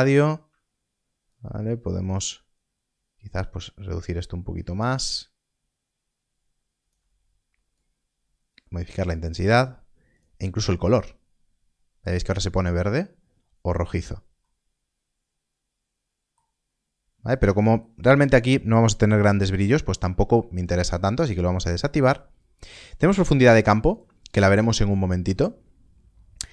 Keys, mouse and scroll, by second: 1.2 shift+click, 7.7 click, 14.4 middle click, 16.6 scroll up 1, 17.1 scroll down 1, 17.6 shift+middle click, 21.1 KP_0, 21.1 click, 23.8 click.